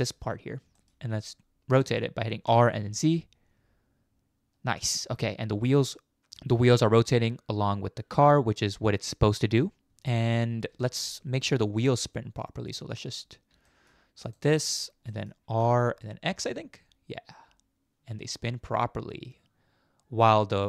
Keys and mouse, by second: 0.0 middle click, 0.8 shift+middle click, 1.2-2.0 middle drag, 2.5 r, 9.9 ctrl+z, 10.8 shift+middle click, 11.1 middle drag, 11.7 shift+middle drag, 13.7 shift+middle click, 14.3 middle click, 14.7 middle click, 15.1 middle click, 15.7 r.